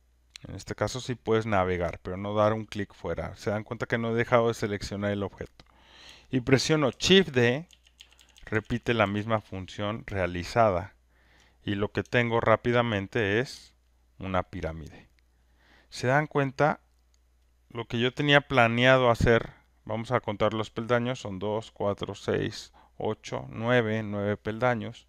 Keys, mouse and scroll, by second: 0.1 alt+middle click, 0.7 alt+middle click, 1.4 alt+middle click, 1.7 alt+scroll, 2.3 alt+click, 7.7-9.0 typing, 11.2 alt+middle click, 12.9 click, 14.4 alt+right click, 15.9 alt+click, 17.5 click.